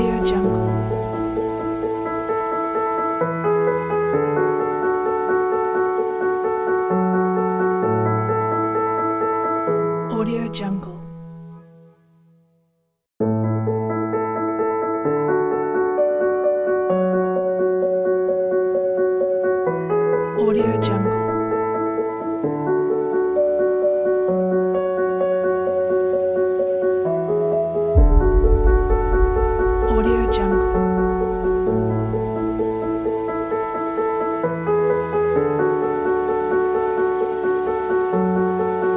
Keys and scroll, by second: 9.3 s.